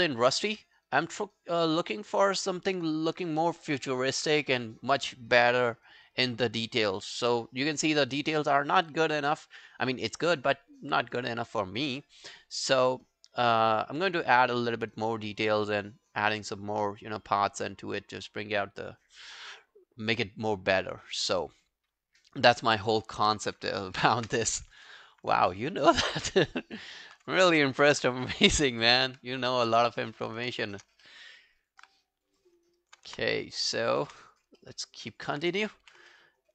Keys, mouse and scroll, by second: 12.2 scroll down 8, 24.0 ctrl+i, 24.4 ctrl+scroll down 1, 24.9 alt+middle click, 25.2 alt+right click, 25.5 alt+middle click, 25.7 alt+right click, 26.0 alt+click, 26.3 alt+middle click, 26.5 alt+right click, 26.7 alt+click, 28.8 Up, 29.0 alt+middle click, 29.3 alt+scroll down 1, 29.5 alt+click, 29.8 alt+right click, 30.0 alt+middle click, 30.1 alt+scroll down 1, 30.3 alt+right click, 30.7 shift+click, 31.1 alt+middle click, 31.3 alt+right click, 31.6 alt+click, 32.6 scroll down 1, 32.8 alt+click, 33.1 space, 34.1 space, 34.6 alt+middle click, 35.2 alt+middle click, 35.9 w, 36.1 alt+middle click.